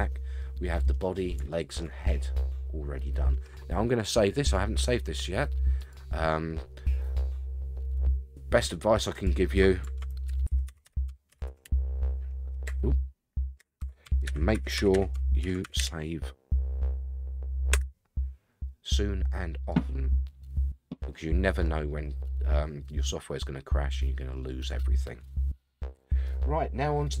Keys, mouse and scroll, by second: 0.1 scroll down 3, 0.4-1.1 middle drag, 1.5 shift+middle drag, 2.0-3.4 middle drag, 4.4-6.1 drag, 21.6-26.2 middle drag.